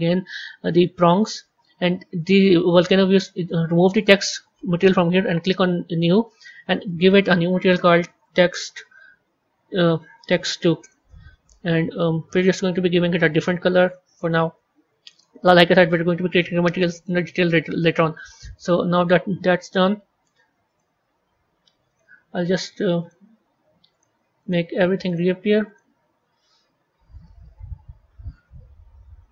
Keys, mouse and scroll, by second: 4.0-6.6 drag, 6.7 click, 12.2 click, 16.3 middle click, 17.1-17.6 scroll down 3, 17.7-20.6 middle drag, 20.6 click, 21.8 click, 22.9 click, 23.9 click, 24.3 click, 25.1 click, 26.2-27.5 scroll down 3, 27.5-28.4 scroll down 3, 28.4 z, 29.1-29.3 scroll down 2.